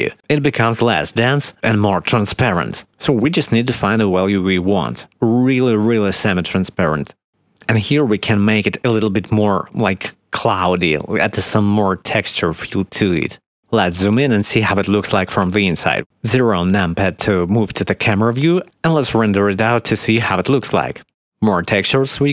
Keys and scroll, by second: 0.0 0, 0.3 Return, 3.5 0, 3.6 Return, 4.6 1, 4.7 Return, 13.8 5, 14.0 Return, 17.6 0, 18.5 ctrl+s, 19.4 F12.